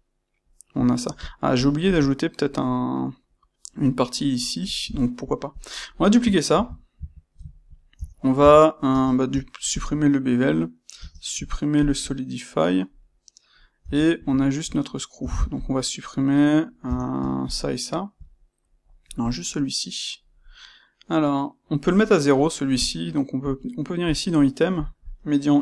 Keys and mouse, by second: 5.4 click, 6.4 shift+d, 7.0 Escape, 7.4-15.5 ctrl+middle drag, 7.8 Tab, 8.8 space, 13.7 Tab, 15.1 Tab, 15.5 click, 16.8 Tab, 17.4 shift+click, 18.2-19.2 middle drag, 19.2 click, 22.3-23.3 middle drag, 23.3-24.1 drag, 24.7-25.6 drag.